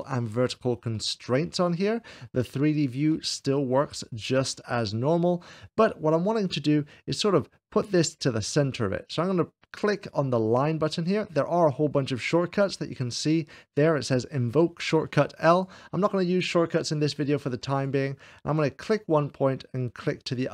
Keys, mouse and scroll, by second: 4.5-5.7 shift+middle drag, 15.4-18.6 drag, 20.1 click.